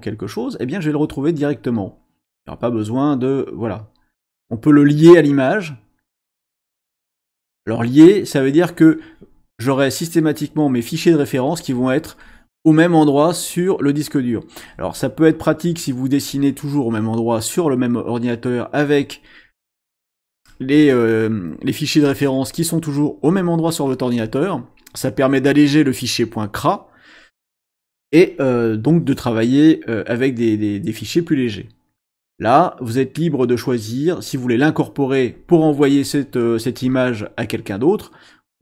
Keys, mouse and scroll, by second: 2.4 click, 7.2 click, 33.2 click, 34.1 click.